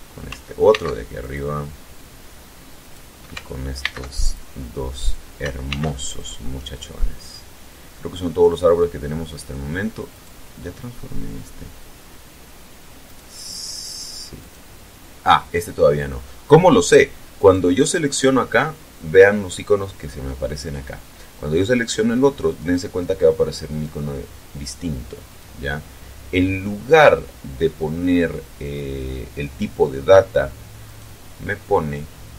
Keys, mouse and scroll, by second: 0.5 alt+c, 1.0 alt+click, 1.7 scroll down 2, 2.6 right click, 3.6 alt+c, 3.9 alt+click, 4.8 right click, 5.4 alt+c, 5.8 alt+click, 6.4 scroll down 2, 6.8-8.7 middle drag, 8.8 scroll up 2, 9.3 scroll up 2, 9.9 right click, 12.8 right click, 14.2 right click, 17.1 right click, 23.4 right click, 25.0 right click, 30.6 right click.